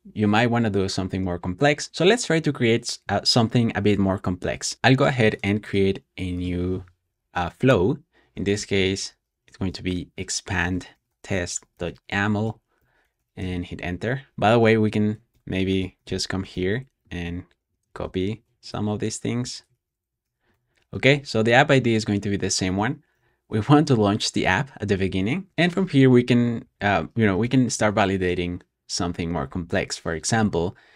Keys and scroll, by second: 8.0-13.8 typing, 15.0 Escape, 15.2-17.2 typing, 17.5 super+c, 17.8 shift+super+], 18.3 Escape, 18.5-19.3 typing, 19.6 super+v, 20.1 super+s, 20.4 Escape, 20.5 typing, 22.7 typing, 26.0-27.8 typing.